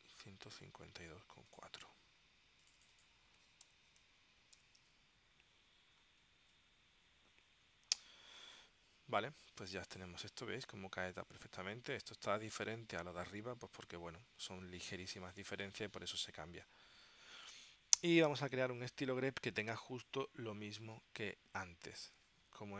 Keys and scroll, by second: 3.3-5.4 typing, 6.5 Tab.